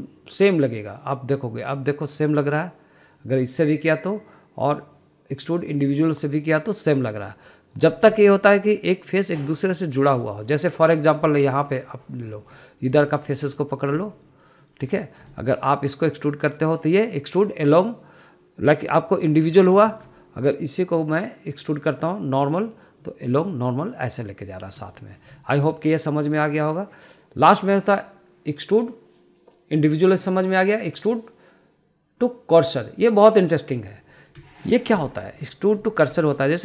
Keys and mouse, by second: 3.3 click, 5.5-7.6 drag, 8.5 click, 9.4 middle click, 10.2 middle click, 11.0 middle click, 11.6 shift+middle click, 11.9 middle click, 12.6 click, 13.6 shift+click, 13.9 middle click, 14.5 shift+click, 14.9 middle click, 15.5 shift+click, 16.0 shift+click, 16.3 middle click, 16.6 shift+middle click, 21.2 ctrl+z, 22.3-23.6 drag, 24.4 click, 26.3 middle click, 26.7 shift+middle click, 27.7-35.2 drag, 35.7 middle click.